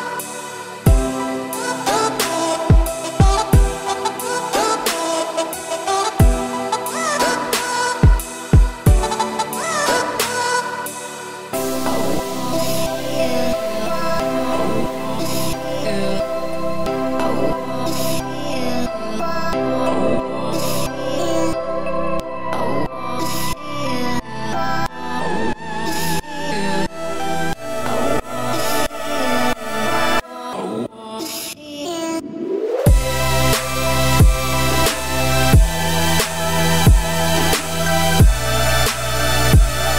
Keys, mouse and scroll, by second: 0.1 `, 0.8-1.6 scroll down 12, 1.6-4.6 middle drag, 4.9-5.7 middle drag, 5.7 `, 6.2 1, 6.9 `, 7.5-8.9 scroll down 22, 7.9-8.3 middle drag, 8.9-10.2 middle drag, 10.2 click, 10.6 scroll down 1, 10.8-11.1 middle drag, 11.1 `, 11.9-12.6 scroll down 2, 12.6 s, 16.6 `, 18.3 r, 23.9 g, 25.5 scroll down 4, 25.6 middle drag, 25.9 scroll up 1, 26.0-27.1 scroll down 27, 27.1 `, 27.6-28.2 scroll down 10, 28.2 x, 28.9 click, 29.1 `, 29.5 scroll down 4, 29.7 middle drag, 30.0-30.4 scroll up 4, 30.4 shift+middle drag, 30.6-31.0 scroll up 3, 31.0 scroll down 1, 31.1-31.9 middle drag, 31.9-32.5 scroll down 5, 33.6 click, 34.3 shift+click, 34.7 `, 35.2 scroll down 2, 35.4-35.9 middle drag, 35.9-36.4 scroll up 2, 36.6 g, 38.0-38.7 scroll down 14, 38.7-39.3 middle drag, 39.3 scroll down 1, 39.6-39.9 scroll up 3.